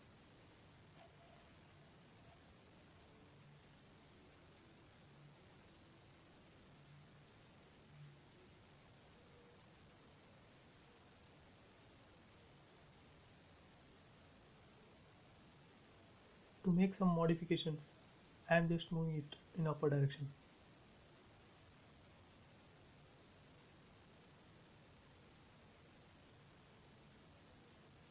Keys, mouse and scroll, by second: 0.3 typing, 0.8 Return, 1.3 space, 2.0 scroll down 1, 2.6 shift+middle click, 3.0-3.5 scroll down 1, 3.8 middle click, 4.3 scroll up 1, 5.2 click, 6.2 Up, 6.4 click, 8.1 m, 8.1 click, 9.2 Up, 9.9-10.8 typing, 10.4 Return, 11.6-12.0 scroll up 1, 12.7 middle click, 13.0 scroll up 1, 14.2-15.7 middle drag, 15.7 click, 16.6 middle click, 17.3 m, 17.6 click, 18.6 Up, 20.3-21.1 typing, 20.8 Return, 21.8 scroll down 1, 23.0-23.6 scroll up 1, 24.1-26.6 middle drag, 26.6-27.1 scroll down 1.